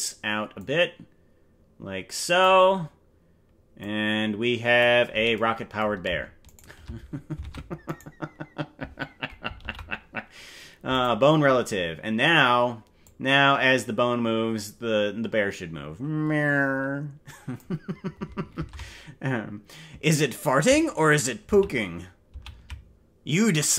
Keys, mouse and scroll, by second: 0.6-2.5 drag, 3.8-4.8 drag, 6.5 shift+right click, 7.4 ctrl+Tab, 7.9 right click, 9.7 ctrl+p, 13.0-17.6 drag, 18.7 ctrl+Tab, 21.9 ctrl+z, 22.7 ctrl+z.